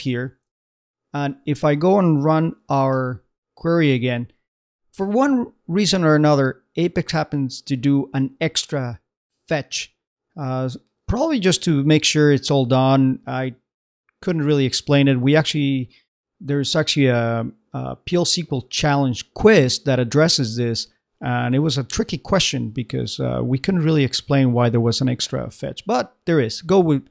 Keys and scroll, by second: 0.6 super+Tab.